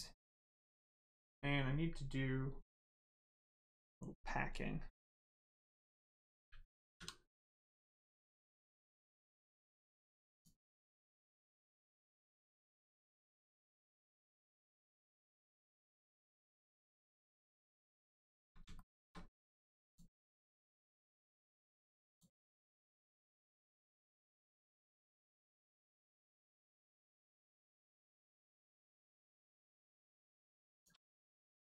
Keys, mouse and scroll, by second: 0.4 right click, 8.7 click, 11.7 click, 16.1 click, 18.7 shift+middle click, 19.8 click, 20.4-20.7 scroll up 1, 20.9 shift+middle click, 22.0 click, 24.5 click, 25.9 shift+click, 31.5 click.